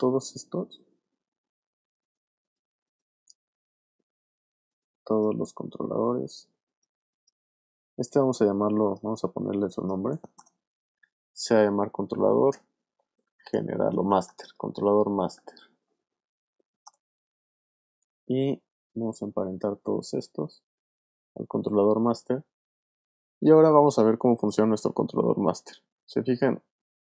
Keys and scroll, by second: 10.4 Return, 11.3 shift+Return, 11.7-15.6 typing, 16.8 Return, 23.5 v.